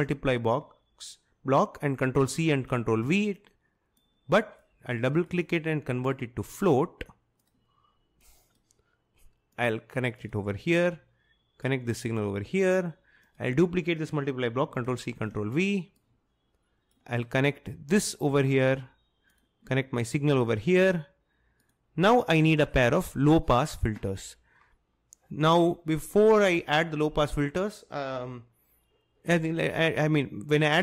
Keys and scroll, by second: 2.3 ctrl+c, 3.0 ctrl+v, 14.8 ctrl+c, 15.1 ctrl+v.